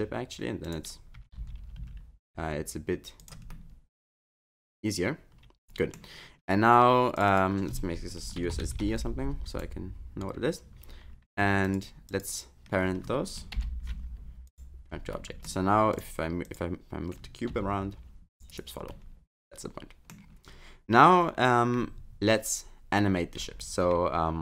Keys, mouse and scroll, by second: 1.2 s, 3.5 middle click, 7.2 click, 7.3 click, 8.5 shift+u, 11.6 shift+click, 12.1 shift+click, 13.6 ctrl+p, 15.2 middle click, 16.0 click, 16.4 click, 17.5 g, 18.9 middle click, 20.3 scroll down 3, 24.0-24.4 scroll up 1.